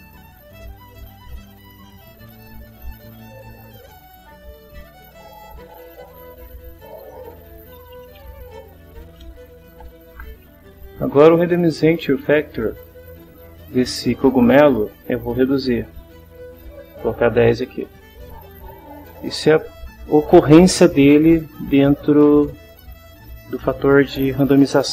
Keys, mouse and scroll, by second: 0.9 click, 2.2 click, 3.7 click, 4.5 click, 5.2 click, 6.7 click, 7.5-9.7 typing, 9.7 Return, 13.0 click, 16.9 1, 17.5 0, 18.7 click.